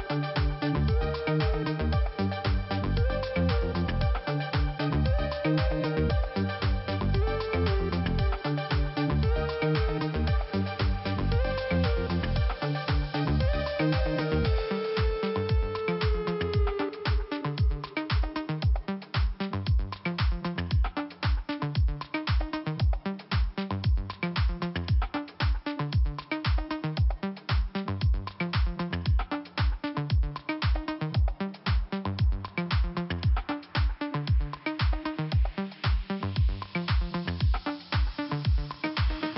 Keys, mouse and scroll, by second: 0.8 click, 3.0 click, 6.1 click, 7.4 scroll down 2, 8.9-10.1 scroll up 1, 10.3 middle click, 12.5 click, 14.5 click, 16.5 click, 16.6 click, 17.5 click, 19.3 middle click, 20.4 click, 21.7 click, 23.2 click, 25.5-26.4 scroll up 2, 26.4 middle click, 27.5 f, 28.2-29.1 scroll down 1, 29.1 scroll up 1, 29.7 middle click, 30.6-31.0 scroll up 2, 31.0 middle click, 32.1 click, 32.2 click, 34.1-34.9 scroll down 1, 35.1 scroll down 1, 36.1 middle click, 37.3 middle click, 38.1 scroll up 2, 39.0 click.